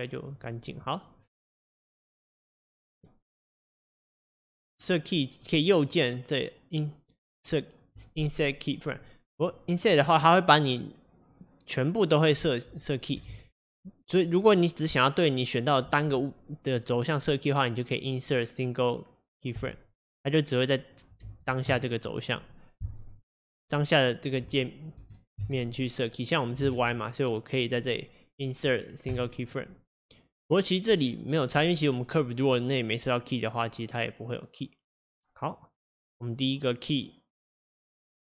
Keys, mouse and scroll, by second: 2.6-9.5 drag, 13.4 ctrl+z, 21.3 ctrl+z, 23.5 g, 26.7 ctrl+z, 29.2-31.5 right drag, 32.6-35.8 drag.